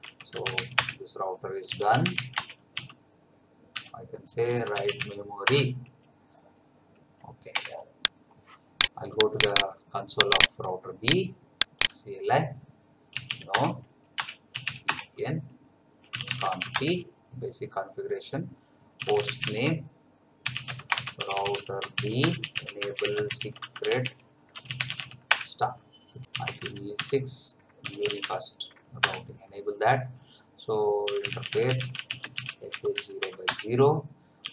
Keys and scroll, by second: 0.0-2.7 typing, 0.8 Return, 3.7-5.5 typing, 7.5 Return, 12.9-17.1 typing, 18.7-28.5 typing, 25.5 Return, 29.0 Return, 30.8-34.5 typing.